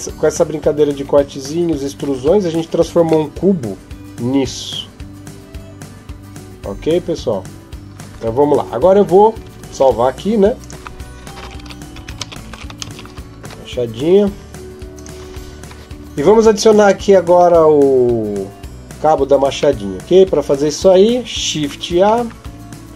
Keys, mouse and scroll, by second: 2.0 Tab, 2.3 scroll up 1, 2.4-3.1 scroll down 1, 3.1 middle click, 3.1-4.1 scroll down 1, 14.8 click, 17.0-17.5 scroll down 4, 19.3-19.6 scroll down 1, 19.6 middle click, 20.0 scroll up 1, 21.8-22.5 scroll up 4, 21.8 shift+a.